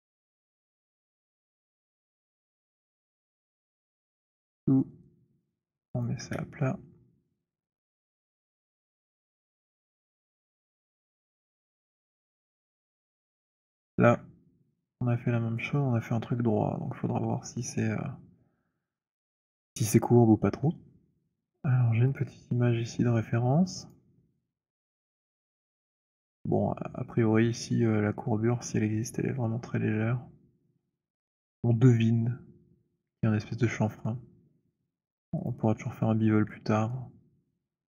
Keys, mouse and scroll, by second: 0.5 ctrl+d, 1.9 r, 4.1 click, 6.0 click, 6.2 w, 7.7-11.8 typing, 11.8 click, 14.0 alt+click, 22.1 click, 24.2 click, 35.5 click.